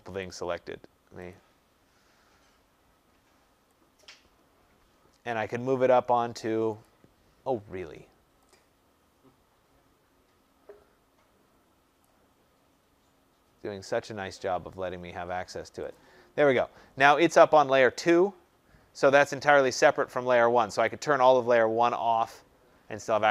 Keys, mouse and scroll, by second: 6.8 click, 11.9 click, 15.9 click, 20.8 click.